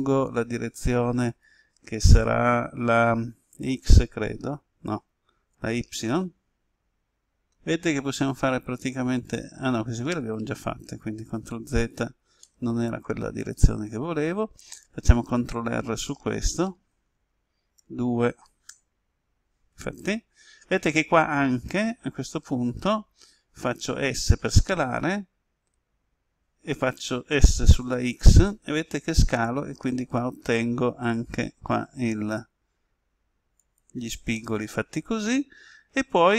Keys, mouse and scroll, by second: 5.6 y, 10.2 right click, 11.3 ctrl+z, 12.4-15.0 middle drag, 16.9 ctrl+r, 17.8 ctrl+r, 18.6 Return, 23.8 s, 33.6 click, 34.3-36.3 middle drag.